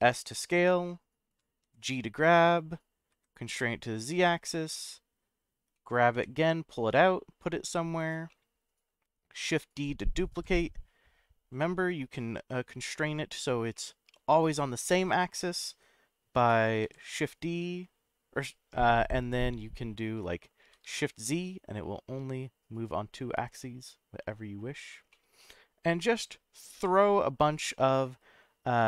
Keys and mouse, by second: 1.3 click, 1.6 g, 3.1 z, 4.4 click, 4.7 middle click, 5.7 middle click, 8.0 click, 8.0 g, 8.3-9.4 middle drag, 10.3 shift+d, 13.4 click, 13.7-15.0 middle drag, 16.8 shift+d, 20.6 shift+z, 24.8 click, 25.1-26.4 middle drag, 26.7 g.